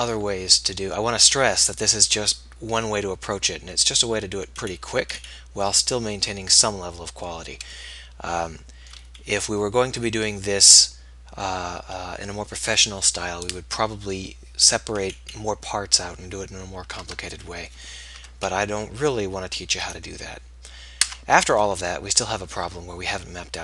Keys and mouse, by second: 11.0-12.6 middle drag, 17.2 Tab, 18.4 alt+h, 21.4 Tab.